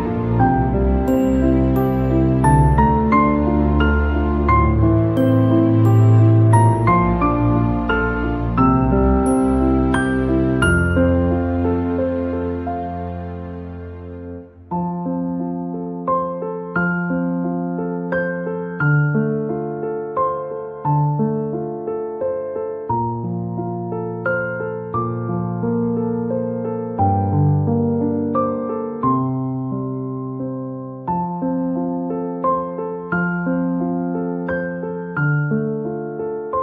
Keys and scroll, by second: 2.6 ctrl+z.